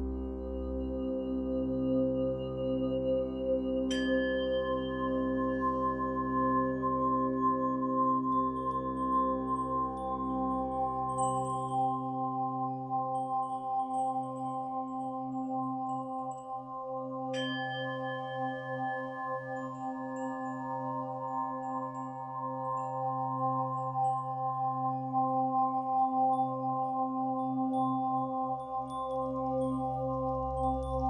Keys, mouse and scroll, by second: 1.2-1.6 scroll down 1, 1.9-4.0 middle drag, 2.2 scroll up 1, 2.7-3.4 scroll up 2, 4.0-12.7 drag, 12.5 scroll down 1, 12.7-15.9 middle drag, 13.0 scroll down 1, 14.0-15.4 scroll up 2, 15.4-15.9 scroll up 1, 15.9 click, 16.5 scroll down 2, 16.7-19.7 middle drag, 20.7 click, 22.0-23.4 middle drag, 23.4 scroll up 2, 23.4 click, 24.9-26.0 middle drag, 26.0 r, 30.1 ctrl+r.